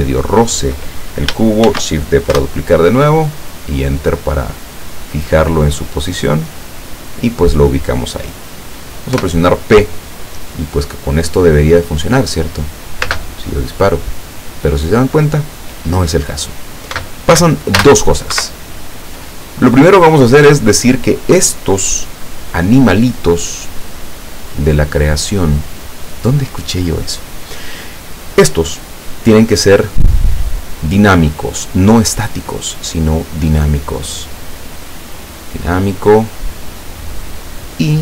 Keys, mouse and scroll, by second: 1.7 shift+d, 2.4 Return, 3.5-6.9 drag, 9.2 p, 13.2 space, 17.8 space, 18.4 Escape, 20.2 right click, 24.0 click, 29.9 click, 32.8 click, 34.1 right click, 34.9 click, 35.5 click, 36.7 right click, 37.7 click.